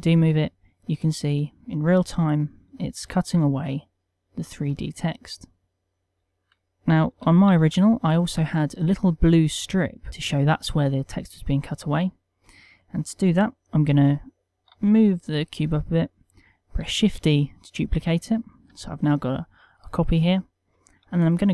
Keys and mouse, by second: 1.8 click, 2.0 middle click, 2.8 g, 6.0 right click, 6.0 KP_1, 6.2 shift+middle click, 7.4 g, 8.5 click, 14.6 g, 15.2 click, 16.8 shift+d, 18.7 g, 21.4 Tab.